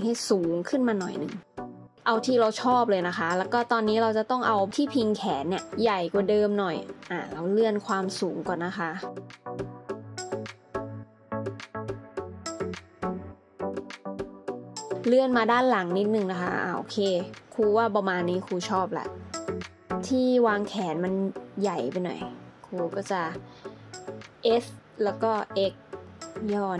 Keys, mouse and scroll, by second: 4.5 Tab, 7.1 alt+z, 7.8 Tab, 9.1 alt+z, 12.4 scroll up 1, 13.5 shift+middle click, 17.9 middle click, 19.1 alt+z, 19.8 scroll down 1, 24.3 alt+z, 24.7 a, 26.0 s, 26.3 x.